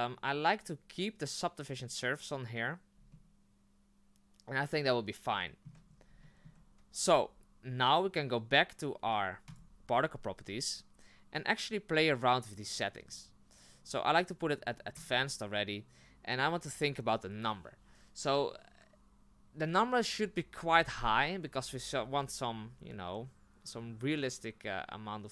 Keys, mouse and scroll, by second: 3.1-5.9 shift+middle drag, 5.9-6.2 scroll up 3, 6.2-7.9 shift+middle drag, 11.4-15.0 middle drag, 15.0 click.